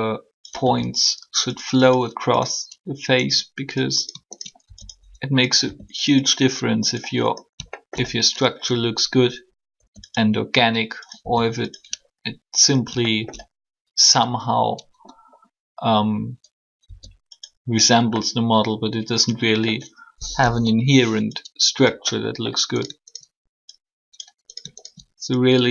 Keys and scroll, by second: 0.6 e, 1.8 r, 5.6 shift+r, 9.7 e, 11.2 r, 16.8 s, 20.4 1.